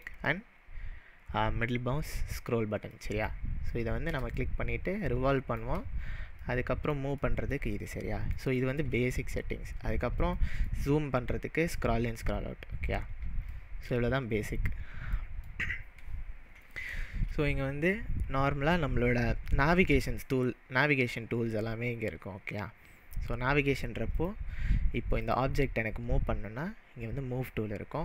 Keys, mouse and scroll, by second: 3.0-5.8 shift+middle drag, 6.4-11.3 shift+middle drag, 11.2-11.7 scroll up 2, 11.7 scroll down 1, 11.8-13.2 scroll down 5, 13.5-18.2 shift+middle drag, 24.3-25.4 drag.